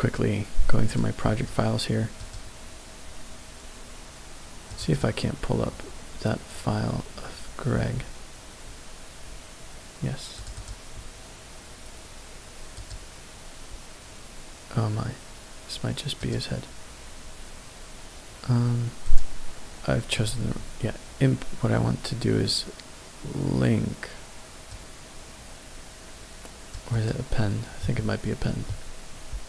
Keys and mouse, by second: 20.2-27.2 drag.